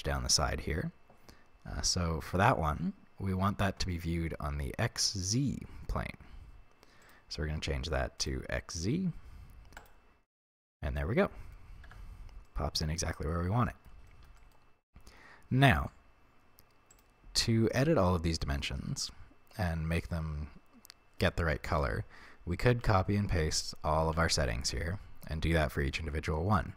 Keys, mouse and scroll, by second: 7.0-10.7 drag, 11.0-16.9 middle drag, 11.9 Tab, 16.9 click, 18.4-19.6 middle drag, 19.6 click, 20.4 scroll down 1, 21.9 ctrl+c, 22.8 ctrl+v.